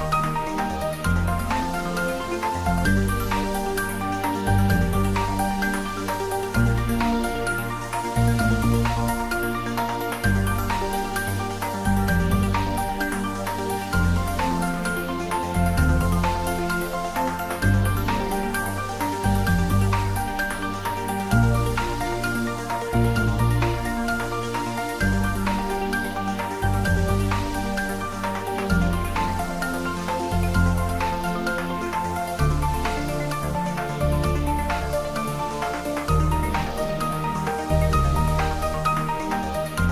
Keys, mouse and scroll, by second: 3.3 shift+click, 7.0-13.1 drag, 16.0 ctrl+z, 17.8 shift+click, 21.1 shift+click, 21.6 ctrl+k, 25.6 click, 29.5 click, 31.7 Tab, 34.0 Tab, 36.1 click, 39.7 click.